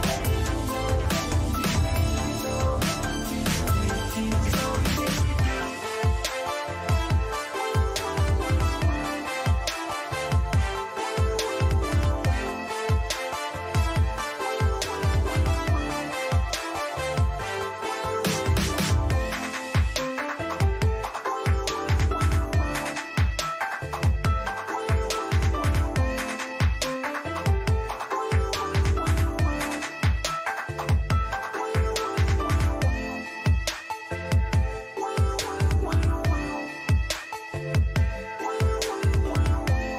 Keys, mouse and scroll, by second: 3.8 right click, 4.6-5.6 drag, 4.6-5.6 middle drag, 5.6 KP_Decimal, 6.6-8.9 middle drag, 10.9 KP_3, 12.8 g, 21.1-22.1 middle drag, 22.1 z, 22.8 z, 23.7 a, 24.3-26.0 middle drag, 26.3-29.3 middle drag, 32.3-34.3 middle drag, 34.3 Tab, 35.3-37.0 middle drag.